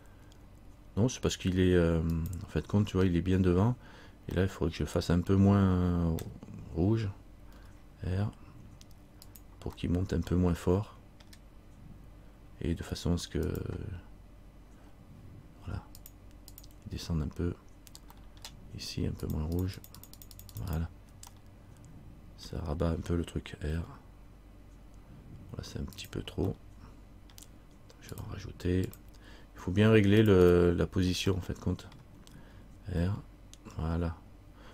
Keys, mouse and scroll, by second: 3.0-4.5 scroll up 2, 4.6 middle click, 5.7 middle click, 7.7 r, 10.2 middle click, 13.6 click, 18.3 middle click, 19.4 click, 20.2-21.4 click, 21.5 middle click, 23.9 r, 26.7 middle click, 28.3 click, 30.4 click, 31.5 middle click, 33.2 r.